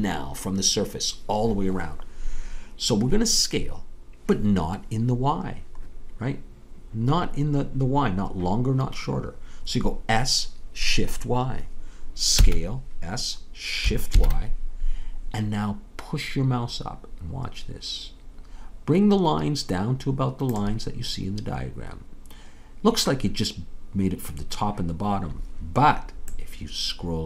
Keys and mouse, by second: 12.4 s, 26.4-27.2 middle drag.